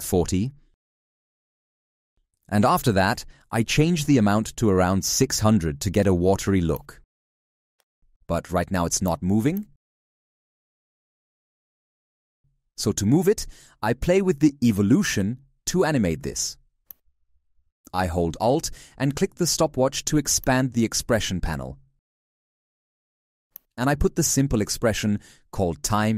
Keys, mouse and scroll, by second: 4.1 shift+click, 17.1 ctrl+z, 18.2 z, 20.2 alt+click.